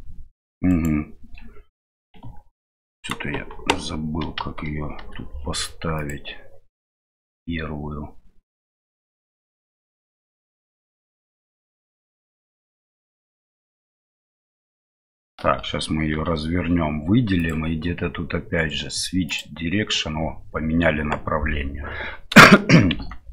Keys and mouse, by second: 2.2 Tab, 4.3 t, 4.9 t, 6.1-14.7 drag, 15.5 a, 17.5-19.4 drag, 22.5 shift+middle click, 23.0 Tab.